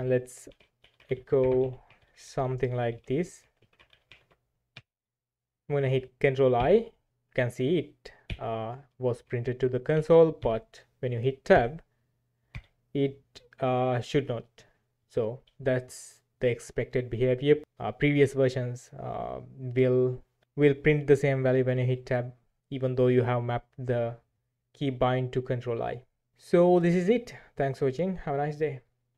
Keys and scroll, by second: 0.0-4.6 typing, 4.7 Return, 6.5 ctrl+i, 8.2 ctrl+i, 9.9 shift+;, 10.4 Escape, 11.6 Tab, 12.6 Tab.